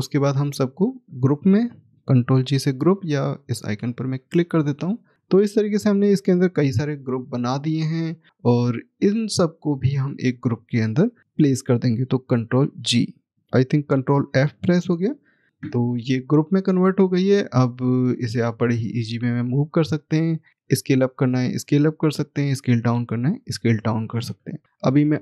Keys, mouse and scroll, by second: 3.7 click, 6.1 click, 7.0 middle click, 7.8 scroll down 1, 9.1 click, 17.4 click.